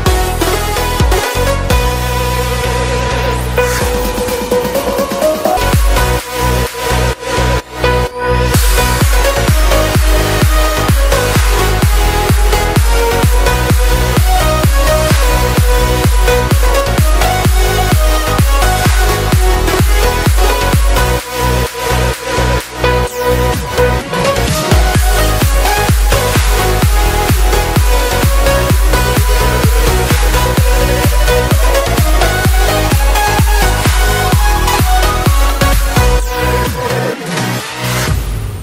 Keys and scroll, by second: 2.7 Down, 24.8 shift+super+Return, 25.4 Return, 35.3 shift+Return, 37.9 super+Return, 38.5 alt+Return.